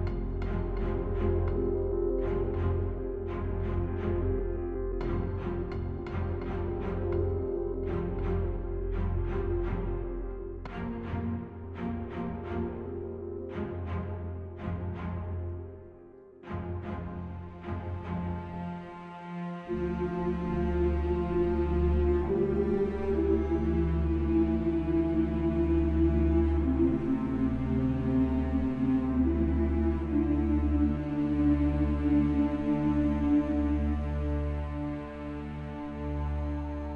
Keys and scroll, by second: 25.1 ctrl+t.